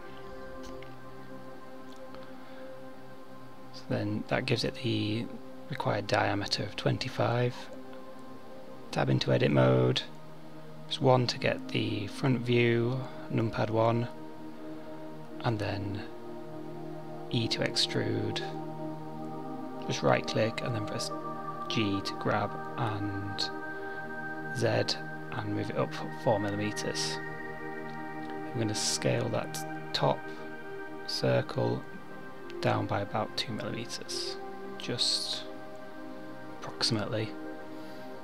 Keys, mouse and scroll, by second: 7.1 KP_1, 9.0 Tab, 11.9 e, 17.3 g, 28.9 s.